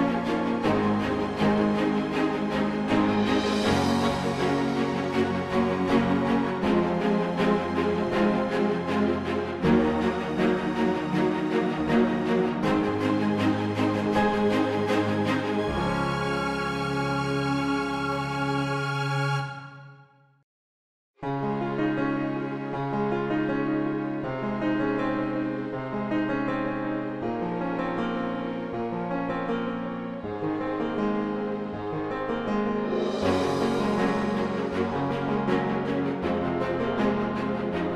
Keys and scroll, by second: 0.3 ctrl+z, 26.4 ctrl+r, 34.8 Delete, 36.5 space.